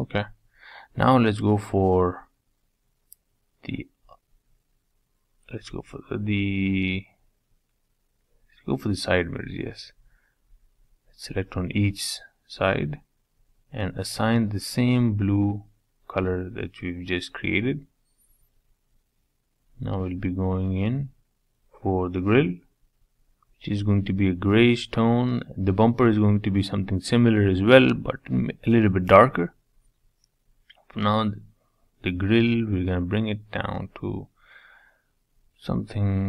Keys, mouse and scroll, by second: 0.6-1.0 scroll up 3, 1.0 middle click, 1.6-4.6 middle drag, 4.6 click, 5.1 middle click, 5.9 scroll up 3, 6.2-7.2 shift+middle drag, 7.2 KP_Decimal, 7.5 middle click, 8.4 shift+click, 8.7-9.5 scroll down 19, 9.5 shift+middle click, 10.4-11.5 scroll up 15, 11.0 shift+middle click, 12.1 shift+click, 12.4 shift+click, 13.6 click, 14.3 click, 14.6-15.0 scroll down 9, 15.1-16.1 middle drag, 16.1 Tab, 16.5 middle click, 17.1 scroll down 3, 17.4-18.4 middle drag, 18.4-18.7 scroll down 3, 18.7 Tab, 19.3-19.7 scroll up 3, 19.7 shift+middle click, 20.3 click, 24.7-29.5 drag, 29.5 l, 36.0-36.2 drag.